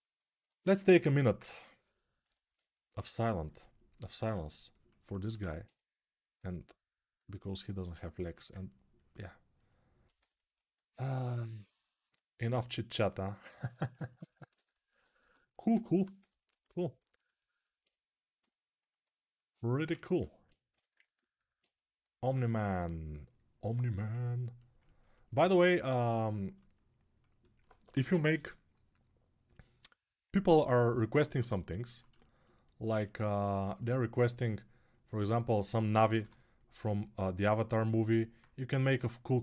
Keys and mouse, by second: 0.7-2.0 alt+right drag, 2.0-18.4 alt+drag, 5.1 2, 14.9 2, 15.9 g, 19.9-39.4 alt+drag, 20.5 g, 35.9 g.